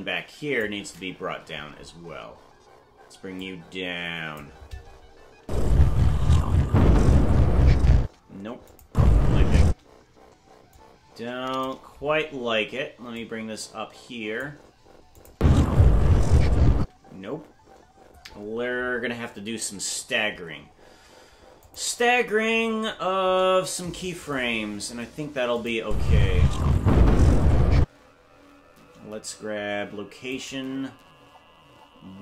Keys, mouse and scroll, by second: 1.3 Left, 1.7-2.2 scroll down 6, 3.3-4.4 drag, 5.4 space, 5.9-6.3 scroll up 6, 8.0 space, 8.7 click, 8.8 space, 9.7 space, 10.7 click, 13.1-14.4 drag, 15.2 click, 15.3 space, 16.8 space, 21.6 click, 22.5-22.9 scroll down 4, 25.6 click, 25.8 space, 27.8 space, 30.3 right click.